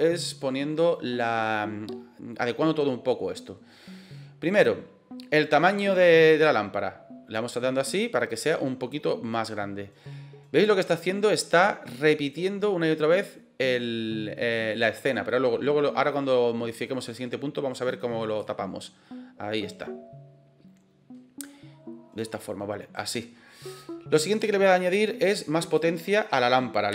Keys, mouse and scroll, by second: 0.0 middle click, 6.4-10.9 drag, 18.4-23.0 drag, 24.2-26.9 drag.